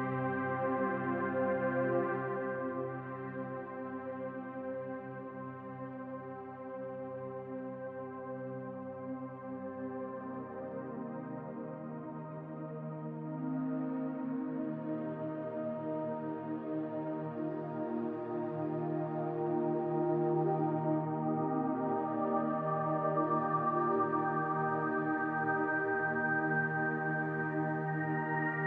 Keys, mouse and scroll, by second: 3.4 scroll down 1, 3.7-5.8 middle drag, 3.9 scroll up 1, 4.8-5.8 scroll up 1, 5.8-7.7 drag, 7.7-8.9 middle drag, 8.9-12.9 drag, 12.6 scroll down 2, 12.9-14.4 middle drag, 13.4-14.3 scroll up 2, 14.3 scroll up 1, 14.4-17.3 drag, 17.3 middle click, 18.3-23.6 drag, 23.3 scroll down 2, 23.6-25.4 shift+middle drag, 24.1-24.9 scroll up 4, 24.9-25.4 scroll up 1, 25.4-28.6 drag.